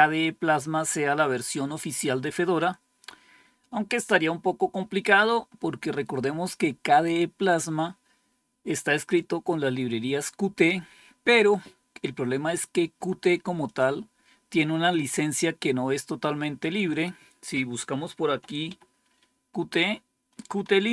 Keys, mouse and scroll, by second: 13.5 click, 14.2 click, 16.8 click, 18.1 q, 18.6 t, 20.8 Right.